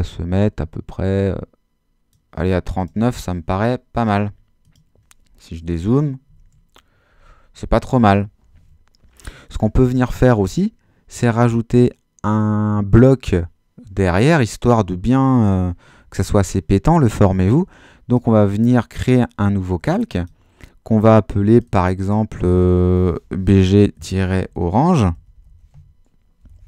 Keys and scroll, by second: 5.6 super+-, 23.2-26.6 typing.